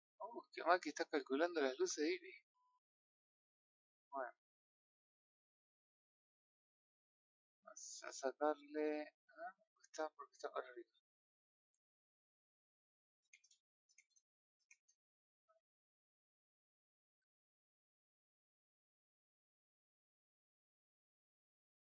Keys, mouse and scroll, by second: 4.6-5.9 middle drag, 5.9-6.9 scroll down 3, 9.3-10.9 middle drag, 10.9 r, 13.3-21.9 drag.